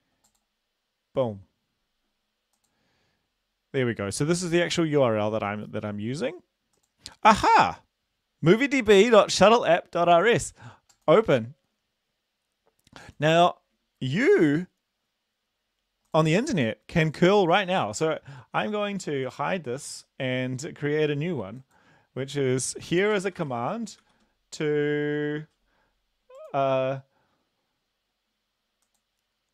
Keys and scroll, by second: 22.8-23.4 typing, 24.0 ctrl+v.